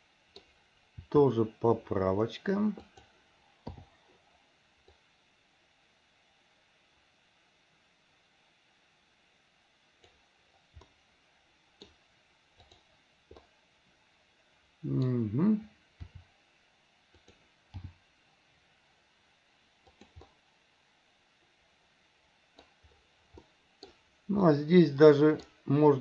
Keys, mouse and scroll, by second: 1.2 r, 4.0 i, 5.1-10.3 drag, 11.0-12.1 middle drag, 12.8 click, 13.5-15.3 middle drag, 16.3 r, 18.0 g, 20.4-22.8 middle drag, 23.6-24.1 middle drag, 24.6 scroll up 1, 24.7-25.7 middle drag.